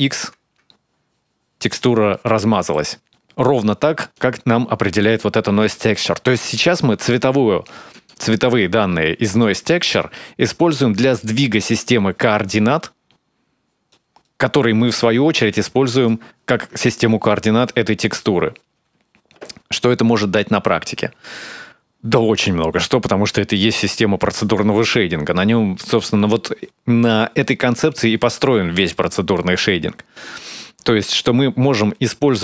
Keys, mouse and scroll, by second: 2.3 middle click, 3.9 click, 5.3-7.0 scroll up 4, 7.4 click, 7.9 ctrl+shift+click, 10.7 click, 13.7 middle click, 15.7 ctrl+shift+click, 19.5-19.9 scroll up 2, 19.9-20.5 scroll down 2, 20.6-21.1 scroll up 2, 21.1-21.4 scroll down 2, 24.8-25.4 scroll up 3, 27.6 middle click.